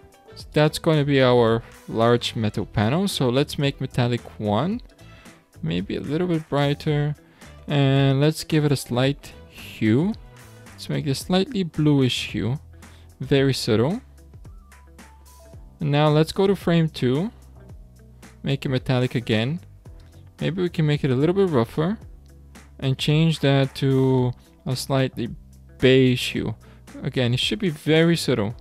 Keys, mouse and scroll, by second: 2.8-5.0 drag, 8.0 click, 14.3-14.7 scroll down 2, 15.4-15.7 scroll up 7, 16.3 click, 16.9-17.4 scroll down 2, 18.0 scroll down 1, 18.3-22.4 drag, 22.4 scroll up 2, 23.3 click.